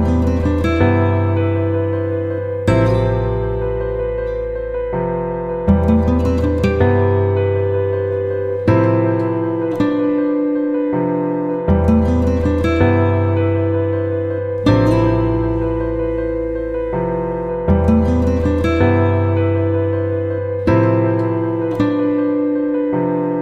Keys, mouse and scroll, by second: 3.2 click, 5.8 ctrl+g, 8.0 click, 9.1-9.7 typing, 11.1-12.9 typing, 14.5 click, 15.5 shift+p, 16.7-21.9 typing, 23.2 click.